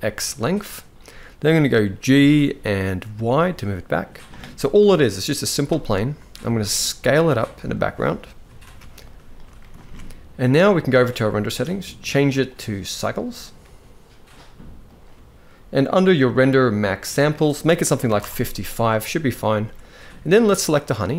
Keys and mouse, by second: 0.0-0.3 middle drag, 1.8 g, 4.5 KP_0, 6.1 s, 8.3 ctrl+b, 9.6 ctrl+s, 10.9 click, 12.2-12.8 drag, 14.0-14.6 drag, 16.8-17.9 drag, 17.7 5, 19.2 ctrl+s, 20.1 click.